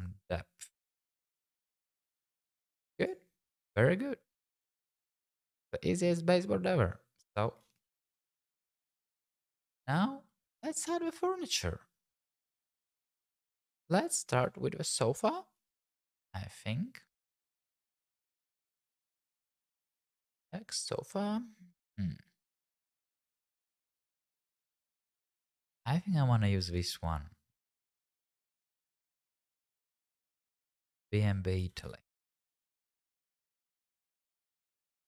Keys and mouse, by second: 0.1-1.4 shift+drag, 1.7 click, 7.7 middle click, 8.9 click, 9.6 middle click, 13.8 click, 14.2 shift+click, 15.8-17.2 drag, 18.0 click, 19.0 click, 20.7 click, 28.7 r, 28.8 z, 28.9 KP_9, 29.0 KP_0, 29.3 KP_Subtract, 29.8 KP_Enter, 31.6 g, 32.0 shift+z, 33.0 click.